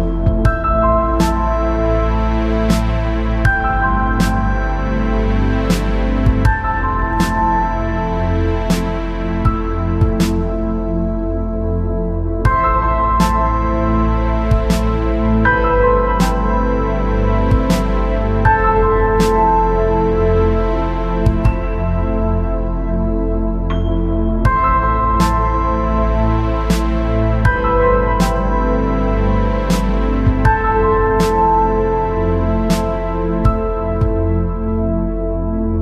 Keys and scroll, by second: 10.8-11.5 space, 11.7 space, 25.8 ctrl+z, 26.4 ctrl+z, 33.5-35.0 typing.